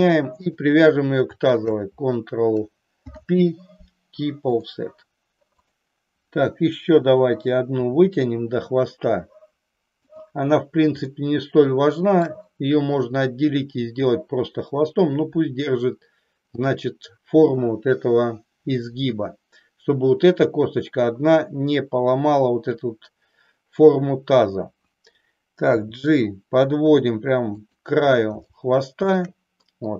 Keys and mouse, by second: 0.6 click, 1.7 shift+click, 3.0 ctrl+p, 5.6 click, 7.7 e, 10.1 click, 11.1-12.2 shift+middle drag, 25.6 g, 27.6 click, 28.6 shift+middle click.